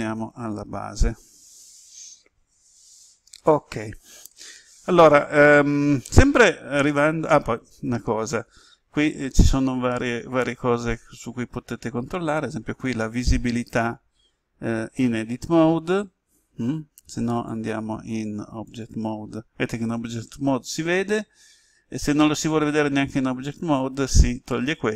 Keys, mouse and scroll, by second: 0.1 ctrl+z, 0.4 ctrl+z, 12.8 click.